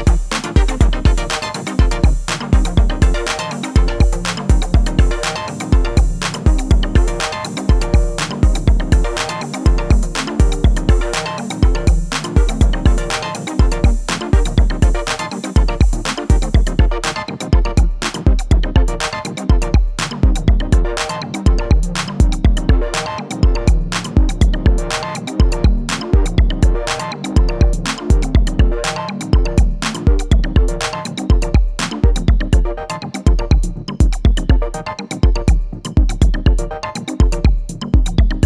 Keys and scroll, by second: 18.2-19.4 typing, 26.3 ctrl+-, 26.7 ctrl+=, 32.2 ctrl+-, 33.6 ctrl+=, 37.0 ctrl+].